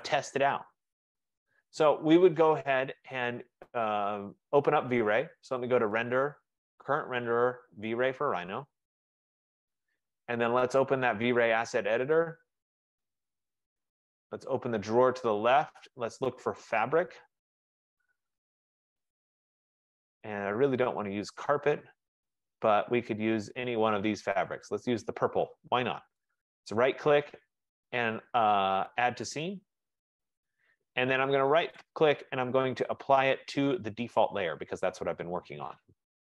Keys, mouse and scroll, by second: 0.2 right click, 1.0 middle click, 5.5 middle click, 5.8-8.3 drag, 11.6 click, 14.7 click, 18.3 click, 20.2 middle click, 20.2 middle click, 20.3 middle click, 20.5 middle click, 21.6 middle click, 21.7 scroll, 22.3-22.8 scroll, 24.7 click, 26.4 right click, 29.3 click, 29.5 F15, 31.9 right click, 34.8 click.